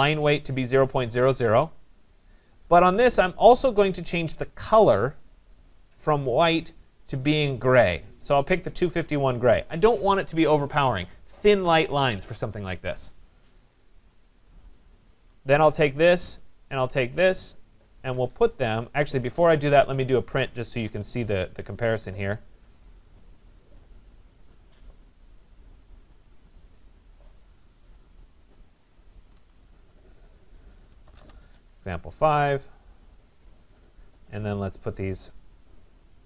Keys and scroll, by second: 19.2 Escape, 31.0 BackSpace.